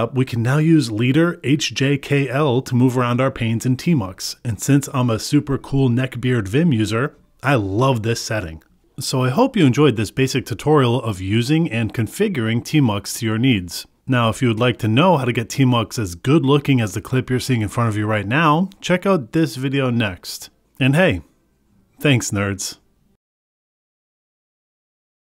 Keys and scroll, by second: 9.6 Return, 11.6 ctrl+s, 13.5 Return, 14.7 Return, 16.7 Return, 19.6 ctrl+s, 21.0 Return, 21.6 ctrl+s, 22.4 Return, 24.5 Return.